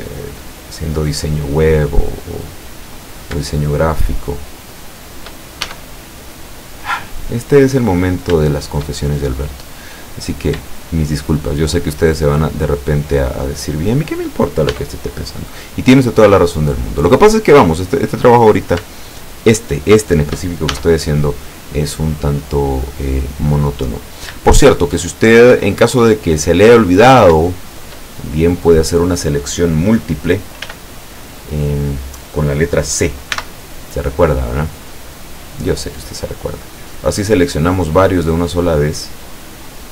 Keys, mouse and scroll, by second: 0.1 shift+right click, 1.4-1.8 scroll down 1, 3.2 shift+right click, 3.6 shift+right click, 4.3 shift+right click, 4.7 shift+right click, 5.7 shift+e, 6.6 click, 7.0-8.1 middle drag, 8.1 scroll down 3, 8.6-9.0 shift+middle drag, 9.4 middle click, 10.3 right click, 10.7 shift+right click, 11.3 shift+right click, 12.2 shift+right click, 12.7 shift+right click, 13.1 shift+right click, 13.6 shift+right click, 14.0 shift+right click, 14.7 shift+e, 16.2 click, 16.7 middle click, 18.5 right click, 19.2 shift+right click, 19.7 shift+right click, 20.1 shift+right click, 20.7 shift+e, 21.9 click, 23.5-24.2 middle drag, 24.4 shift+scroll up 1, 24.6 shift+middle click, 25.3-25.6 shift+scroll down 2, 25.7-27.0 shift+middle drag, 27.1 scroll up 2, 27.6-28.1 shift+middle drag, 28.2 shift+middle click, 30.7 a, 31.8 scroll up 2, 33.4 c, 35.1 click.